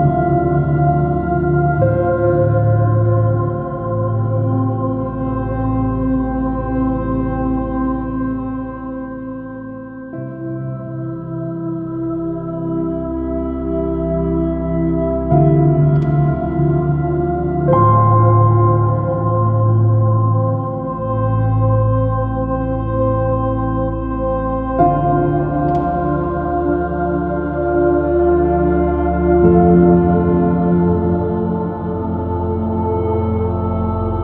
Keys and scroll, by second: 8.7 b, 10.6-11.6 typing, 11.8 super+-, 14.8 super+i, 15.0 super+space, 16.3 super++, 16.6 s, 24.5 b, 30.9 s, 32.9 space.